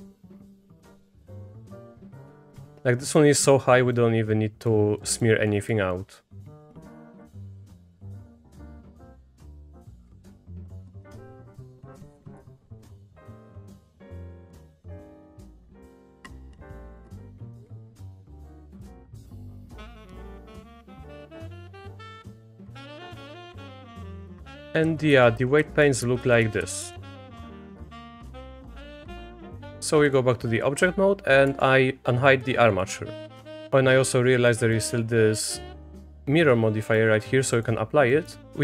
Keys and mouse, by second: 0.7 Down, 0.8 Down, 0.8 Down, 0.9 Down, 1.0 Up, 1.4 shift+click, 1.6 click, 1.8 Escape, 2.1 click, 2.3 click, 3.2 click, 4.3 click, 5.0 click, 5.5 click, 5.9-7.5 drag, 8.5-10.0 drag, 10.2 click, 10.8 click, 11.7 Down, 11.8 Down, 11.8 Down, 11.9 Up, 12.3-14.5 drag, 15.1 Down, 15.2 Down, 15.3 Down, 15.9 shift+click, 16.2-17.6 drag, 18.1 click, 18.3 Down, 18.4 Down, 18.4 Down, 19.1 shift+click, 19.4-22.0 drag, 22.2 click, 22.5 click, 22.7 click, 22.8 click, 23.0 click, 23.2 click, 23.5 shift+click, 24.2 click, 24.3 Down, 24.4 Down, 24.5 Down, 24.6 Down, 24.8 Down, 25.1 Down, 25.4 Down, 25.6 Down, 25.8 Down, 26.0 Down, 26.2 Down, 26.4 Down, 26.6 Down, 26.8 Down, 27.0 Down, 27.2 Down, 27.3-27.6 Down, 28.0 click, 29.5-30.1 drag, 31.5 alt+h, 34.5 click, 34.7 click, 36.8-37.6 drag, 38.1 middle click.